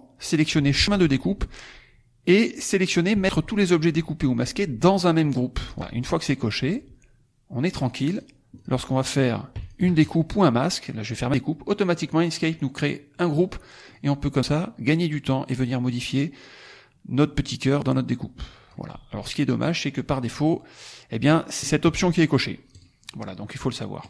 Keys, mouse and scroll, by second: 0.9 click, 5.5 click, 7.6 click, 8.0 click, 8.5 click, 9.6 shift+click, 9.9 shift+right click, 11.1 click, 13.2 click, 13.7 click, 14.4-18.8 drag, 19.5 click, 21.5 click, 22.6 click, 23.9 click.